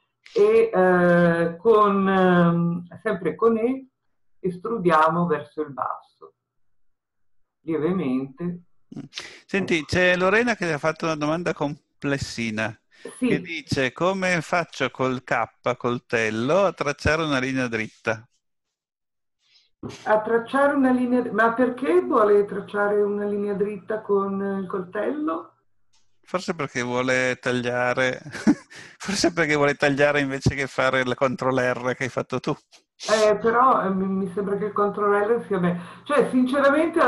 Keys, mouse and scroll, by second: 3.8 e.